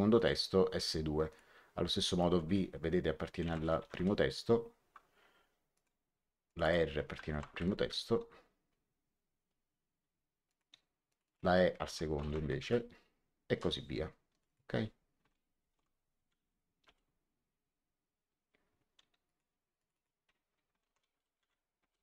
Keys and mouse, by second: 0.1 click, 1.2 click, 3.4 shift+v, 3.7 1, 3.9 Return, 5.6 click, 7.2 shift+r, 7.5 1, 7.7 Return, 10.4 click, 12.1 shift+e, 12.3 KP_2, 12.5 Return, 13.5 click, 15.5 shift+p, 16.2 shift+1, 16.8 Return, 19.2 click, 20.7-21.8 typing.